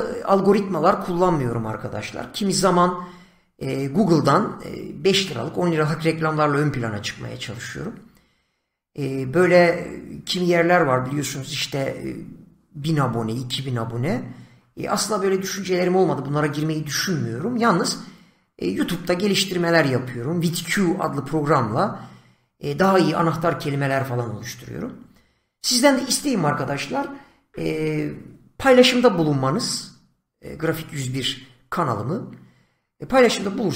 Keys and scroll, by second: 28.3 Left.